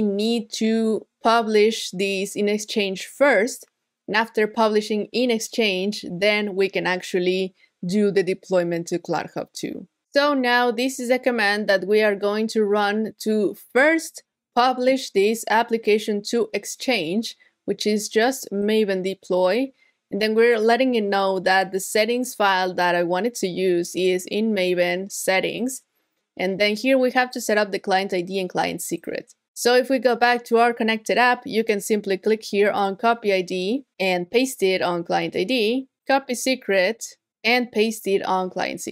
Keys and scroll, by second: 34.3 super+v, 37.2 super+v.